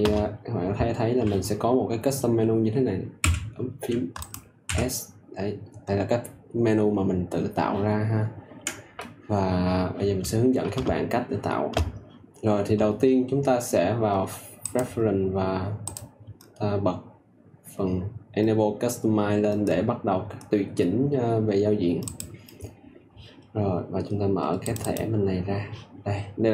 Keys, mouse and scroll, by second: 3.1 s, 4.1 click, 4.6 s, 22.1-26.5 drag.